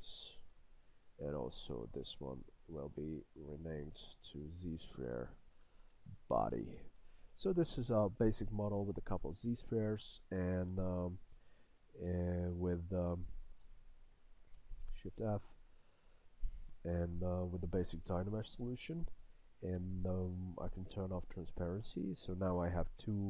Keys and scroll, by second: 0.5 Return, 7.0 Return.